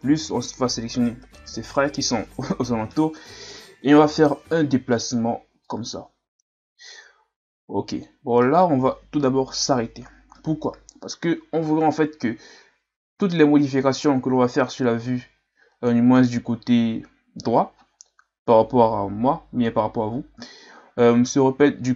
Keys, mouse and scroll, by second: 1.5 KP_1, 5.7-8.7 drag.